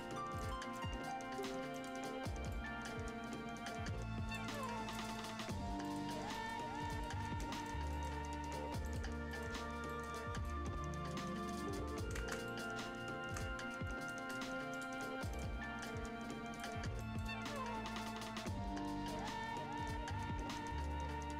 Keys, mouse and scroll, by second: 0.2 scroll down 1, 0.3 right click, 0.7 click, 1.6 scroll up 1, 1.7 right click, 2.5-4.5 drag, 4.7 scroll down 1, 4.9 right click, 5.8 click, 6.1 scroll down 1, 6.3 right click, 6.6 scroll up 1, 7.0 Escape, 7.4 scroll up 1, 7.5 right click, 7.7 scroll down 1, 7.9 right click, 9.1 scroll up 1, 9.3 right click, 9.4 scroll down 1, 9.8 right click, 10.2 scroll up 1, 10.4-12.1 right drag, 12.1 ctrl+space, 12.4 right click, 13.0 Tab, 13.3-15.0 right drag, 15.6 scroll up 1, 15.8 click, 16.8 scroll up 1, 16.9 right click, 18.0-21.3 drag.